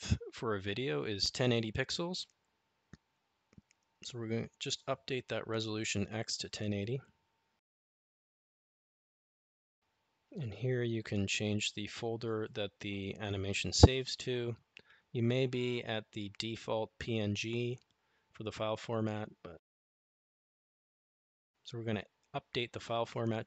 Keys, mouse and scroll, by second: 1.7-7.9 drag, 4.6 BackSpace, 12.7-15.2 drag, 19.8-21.1 drag.